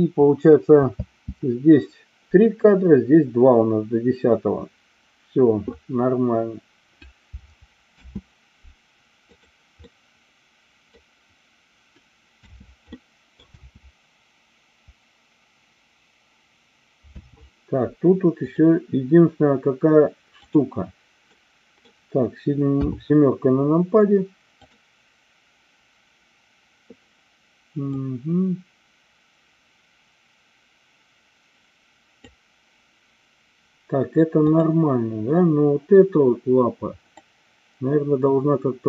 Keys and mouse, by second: 1.0 space, 7.9 space, 9.9-11.0 middle drag, 12.4 space, 12.9 middle click, 17.1 space, 18.4 click, 20.4 click, 21.2 middle click, 22.7 KP_7, 24.5 click, 27.8-32.3 drag, 34.5 click, 37.3-38.8 drag.